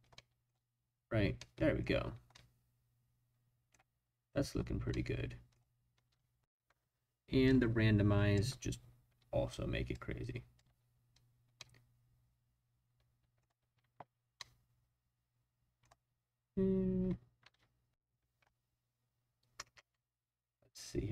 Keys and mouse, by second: 0.1-0.5 middle drag, 1.4-1.8 middle drag, 2.3-3.8 middle drag, 4.9-5.6 middle drag, 5.9 space, 7.5 click, 9.5-9.9 drag, 10.2-10.5 drag, 10.6 space, 11.6-13.4 drag, 14.4 drag, 14.7-15.9 middle drag, 17.4 space.